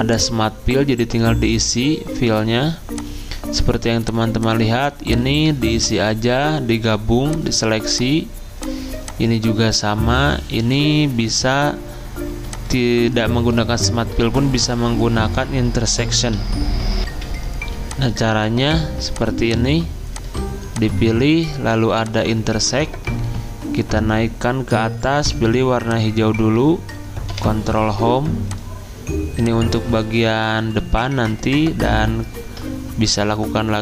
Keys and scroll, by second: 9.6 ctrl+z, 17.0 F10, 27.3 ctrl+Home.